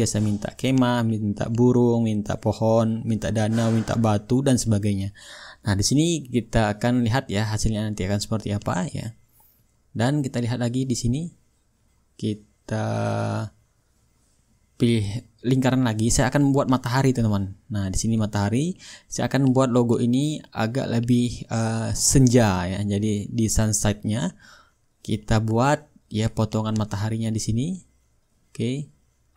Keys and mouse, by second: 1.9-7.1 drag, 4.3-7.1 shift+right drag, 7.6-10.9 drag, 9.8-10.9 shift+right drag, 13.1 click, 13.5-14.3 middle drag, 15.7-19.9 drag, 20.0-22.9 drag.